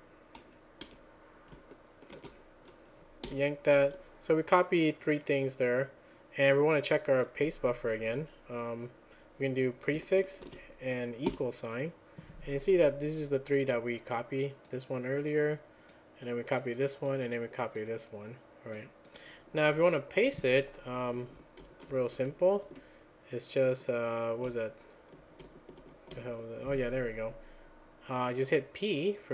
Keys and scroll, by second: 0.6-2.1 typing, 3.3 y, 10.7 ctrl+a, 11.3 =, 22.2 alt+j, 22.7 j, 24.5-26.1 typing.